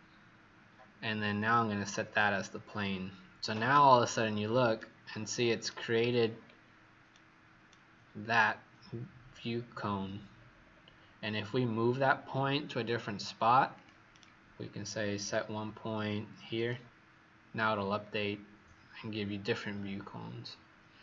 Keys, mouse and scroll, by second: 3.9-4.3 scroll down 5, 4.7 right click, 6.1 scroll up 4, 7.0 right click, 8.2 click, 9.2-10.3 scroll down 3, 10.3-10.6 scroll up 4, 13.7 click, 14.0 right click, 15.1 click, 17.9-18.8 scroll down 3.